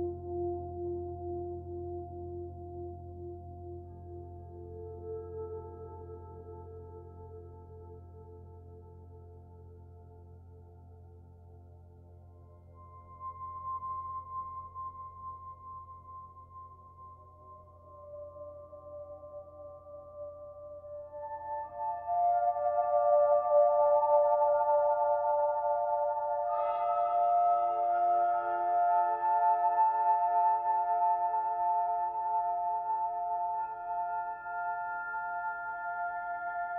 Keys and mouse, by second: 0.2 click, 2.7 click, 3.4-4.9 drag, 8.2-9.9 drag, 10.7 click, 11.7 click, 13.8 click, 15.4 click, 17.3 click, 18.3-21.0 drag, 21.6 click, 23.4 click, 24.1-25.7 drag, 26.2-27.9 drag, 29.0-30.8 drag, 31.7 click, 32.7-33.9 drag, 35.1 click, 36.6-36.7 drag.